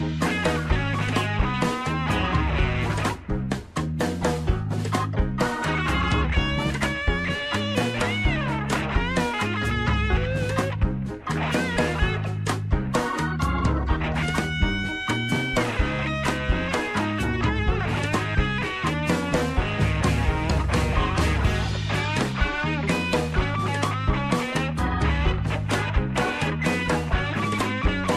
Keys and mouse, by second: 0.5 ctrl+r, 3.4 shift+middle click, 5.0 ctrl+r, 8.9 shift+middle click, 9.9 shift+middle click, 10.8 shift+middle click, 12.2 ctrl+r, 14.0 Tab, 14.6 shift+middle click, 15.2 shift+middle click, 15.4 middle click, 16.2 Tab, 16.9 shift+middle click, 19.2 Tab, 20.1 shift+middle click, 22.2 1, 22.9 click, 26.1 g.